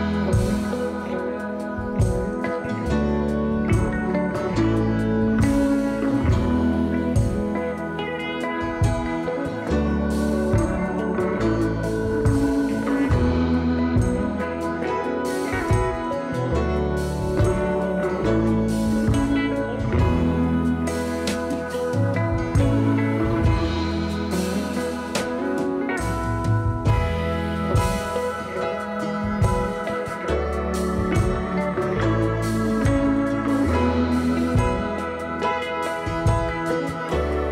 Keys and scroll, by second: 3.9-5.2 typing, 10.1 2, 22.1 3, 26.6 s, 30.6 2, 36.6 s, 37.0 4.